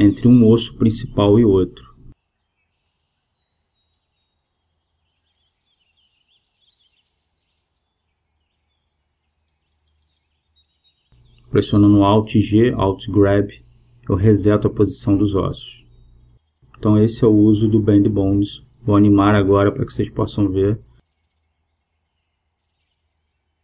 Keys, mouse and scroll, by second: 6.2 middle click, 14.2 alt+g, 15.1 g, 21.4 KP_0.